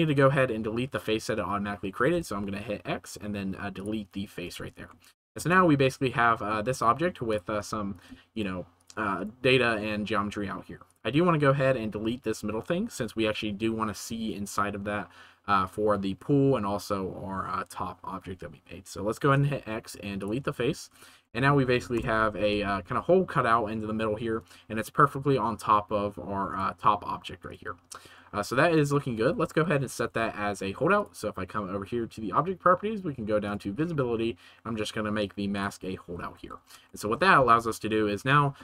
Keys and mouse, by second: 2.1 x, 5.0-6.3 shift+middle drag, 6.5 middle click, 7.9 right click, 8.3 shift+right click, 9.7 middle click, 19.3 x, 20.9 Tab, 21.2 middle click, 21.9 KP_0, 22.4 g, 22.6 z, 27.4-28.7 middle drag, 28.9 shift+middle drag, 29.8 ctrl+s, 33.4 right click, 35.5 right click, 36.4 ctrl+s.